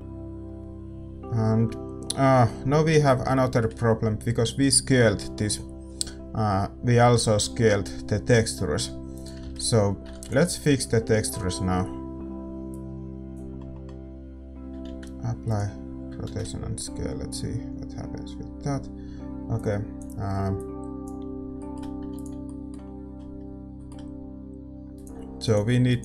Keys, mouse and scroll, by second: 10.6 ctrl+s, 10.6-12.7 right drag, 10.6 shift+z, 15.5 ctrl+a, 15.5-19.6 middle drag, 19.6-26.0 drag.